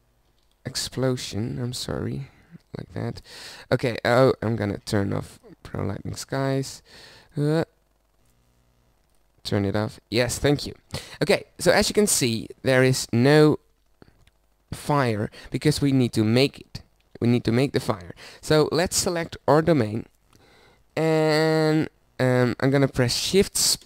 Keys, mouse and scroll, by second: 0.3 ctrl+b, 1.8 shift+z, 4.5 click, 12.7 ctrl+b, 15.4 ctrl+b, 17.0 ctrl+b, 19.6-21.5 drag.